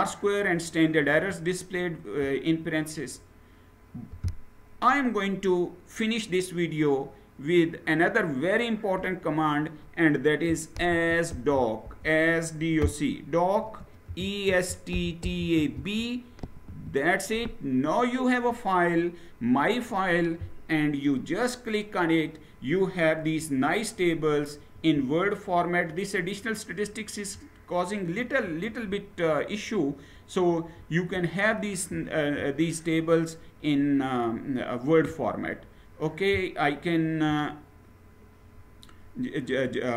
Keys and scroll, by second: 10.3-15.4 typing, 16.4 Return, 23.7 Down, 24.4-28.0 Down, 28.4 Down, 28.5-30.4 Down, 30.8 Down, 31.5 Down.